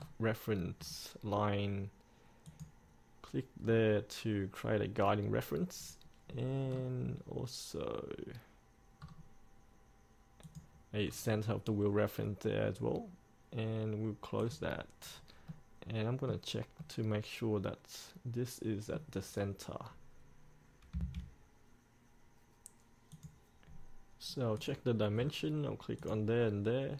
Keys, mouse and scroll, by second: 0.2 scroll up 1, 1.0-2.6 scroll down 1, 2.6-3.7 drag, 3.8-6.5 scroll up 1, 6.5-6.9 scroll down 1, 10.6 click, 11.2 scroll up 1, 14.6 click, 15.3-15.7 scroll up 1, 15.7-19.9 middle drag, 21.2 F8, 23.3 click, 25.3-26.2 scroll down 1, 26.2 click.